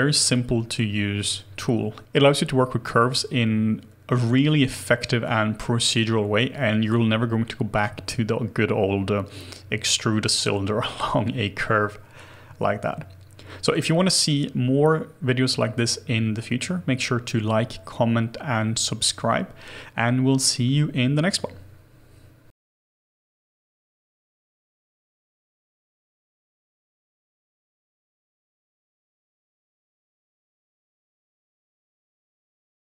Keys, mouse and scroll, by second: 19.8-20.8 scroll down 1.